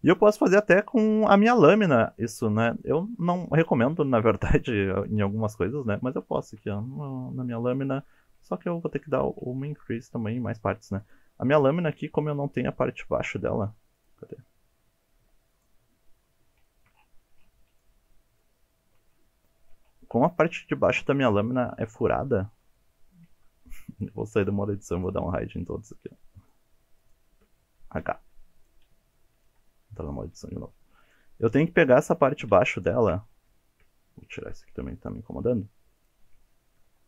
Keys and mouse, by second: 0.1 Tab, 0.4 click, 0.7-1.1 middle drag, 2.7-5.1 drag, 5.8-6.2 middle drag, 6.5 shift+middle drag, 7.2 middle click, 7.8 shift+middle drag, 8.1 Tab, 8.5 shift+middle click, 9.5 alt+z, 9.9 middle click, 11.7-12.2 middle drag, 12.2 2, 12.5 middle click, 14.6 alt+click, 15.0 shift+middle click, 15.4 shift+middle click, 15.6 shift+click, 16.4 alt+click, 17.0 alt+click, 17.3 middle click, 17.6 alt+z, 18.1 shift+drag, 18.4-18.8 middle drag, 18.9 shift+click, 19.2 alt+z, 19.3 drag, 19.5 shift+click, 20.2-21.2 drag, 21.5 shift+middle click, 22.3 alt+z, 22.8 middle click, 23.7 middle click, 24.4 Tab, 25.3 middle drag, 26.4 shift+click, 27.0 shift+click, 28.0 h, 28.6 click, 29.1-29.5 middle drag, 29.6 Tab, 31.0 click, 31.4 middle drag, 32.5 alt+z, 32.8 shift+middle click, 35.0 click, 36.0 shift+click, 36.4 middle drag.